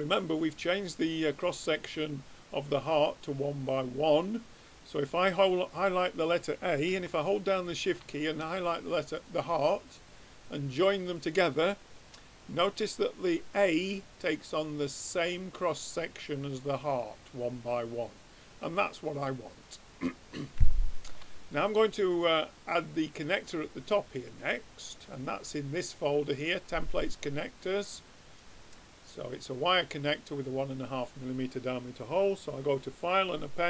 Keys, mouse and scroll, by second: 4.6-6.1 drag, 7.6-11.0 drag, 15.2 middle click, 15.9-18.3 middle drag, 18.3-20.0 drag, 20.1 middle click, 20.8 middle click, 23.4-25.0 drag, 26.5 click, 27.6-29.5 drag, 32.4-33.6 drag.